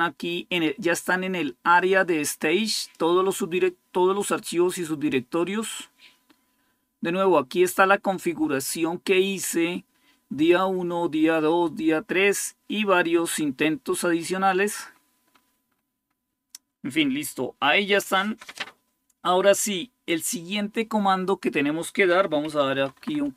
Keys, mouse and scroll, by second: 1.6-3.3 drag, 11.4-12.1 scroll down 1, 15.0-22.2 scroll down 1, 22.2-23.3 typing, 22.2 scroll down 1.